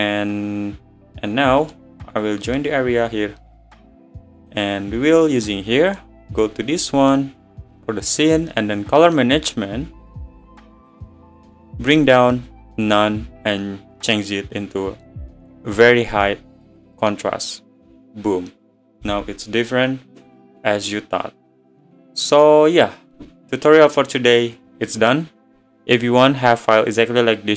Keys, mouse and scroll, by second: 0.1-0.6 scroll down 2, 1.7-4.4 right drag, 4.4 click, 8.0-8.5 scroll down 10, 9.9-11.7 drag, 11.7 scroll down 10, 13.7 click.